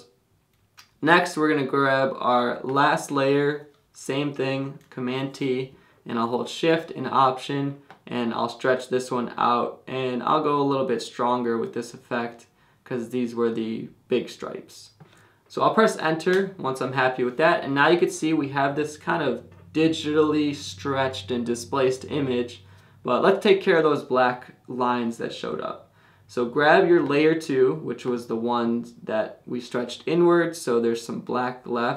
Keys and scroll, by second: 5.1 super+t, 6.2 shift+super+t, 16.3 Return.